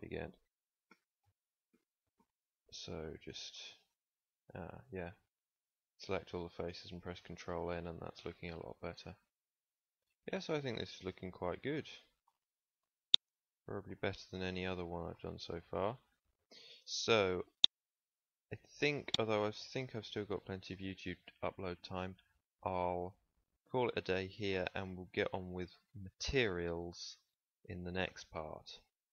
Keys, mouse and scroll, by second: 0.8 ctrl+n, 1.7 ctrl+n, 2.1 ctrl+n, 7.1 Tab, 9.3-9.6 middle drag, 16.3 ctrl+s, 16.7 Tab, 18.4 Tab, 25.4-29.1 middle drag.